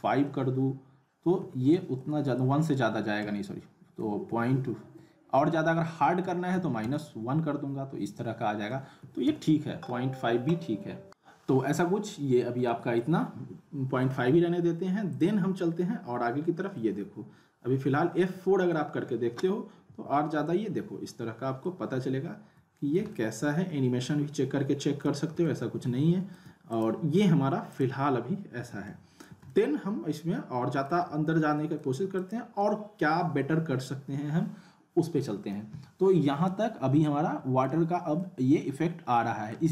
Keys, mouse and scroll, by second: 12.7 middle click, 13.2 scroll down 1, 15.1 click, 16.7-19.0 alt+middle drag, 19.9 F4, 21.6-22.2 alt+middle drag, 25.4-26.4 alt+middle click, 26.7 click, 28.8-31.0 alt+middle drag, 31.1 alt+scroll up 1, 31.2-31.8 alt+middle click, 32.2 click, 36.7 click, 36.9-37.8 alt+middle click, 37.8 scroll up 1, 38.2-39.7 alt+middle drag.